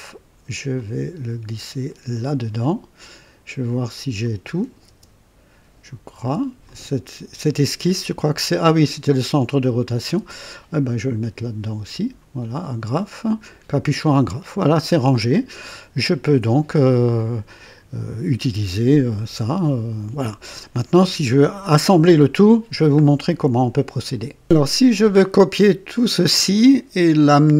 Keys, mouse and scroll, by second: 0.7-2.1 drag, 0.7 typing, 4.1 click, 4.8 typing, 6.1 typing, 6.6 click, 7.6 typing, 10.1 typing, 10.7-12.2 drag, 13.2 click.